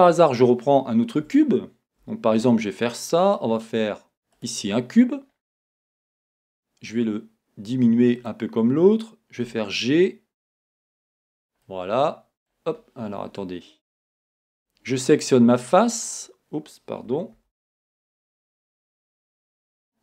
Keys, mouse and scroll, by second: 0.1-8.3 shift+middle drag, 5.3 scroll, 6.2 s, 8.3-9.5 drag, 9.5 g, 10.8 right click, 10.8 click, 11.1 scroll, 11.7-15.1 middle drag, 13.2 scroll, 14.1 scroll, 15.1 click, 15.1 shift+scroll up 1, 17.4 z.